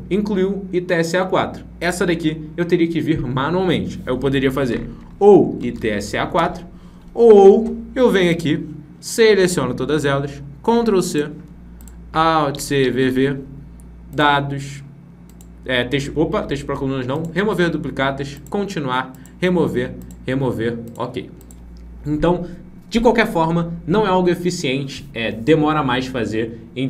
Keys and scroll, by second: 10.6 ctrl+c.